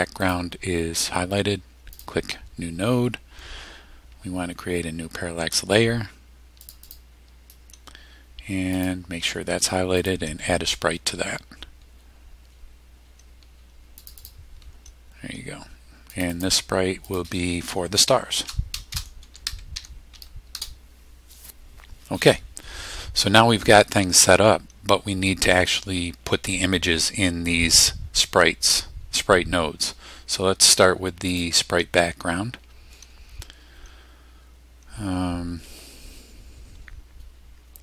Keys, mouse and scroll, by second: 0.2 click, 1.9 click, 4.3-4.8 scroll down 2, 4.5 middle click, 6.6 click, 8.7 click, 10.0 click, 12.2-12.8 scroll up 1, 14.0 click, 16.1 click, 17.0 click, 18.3-20.6 typing, 31.3 click.